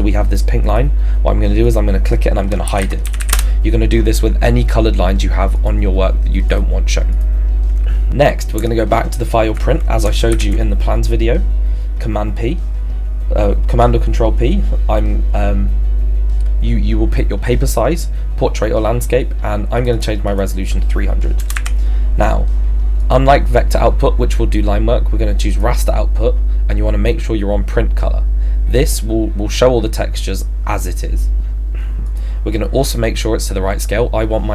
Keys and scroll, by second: 3.3 Return, 10.3 ctrl+f, 19.8 p, 21.4 BackSpace, 21.6 3.